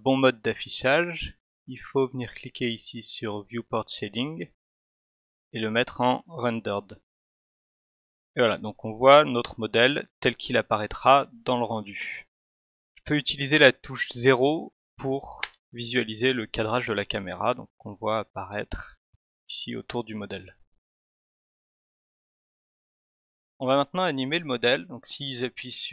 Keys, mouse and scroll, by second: 4.2 click, 15.4 0.